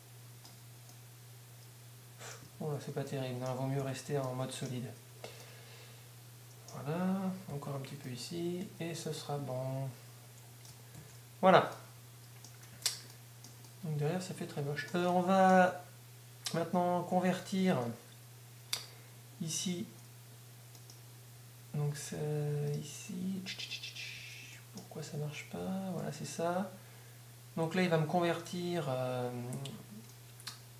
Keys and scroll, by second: 0.1 d, 4.1 z, 8.1 d, 11.0 Tab, 24.2 Tab.